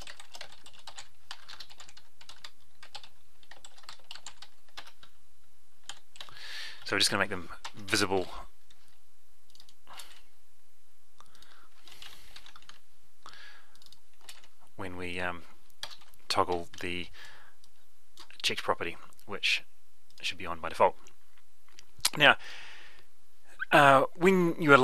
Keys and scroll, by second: 7.5 ctrl+c, 8.1 F12, 10.1 ctrl+v, 12.6 F12, 14.3 ctrl+v, 16.7 F12.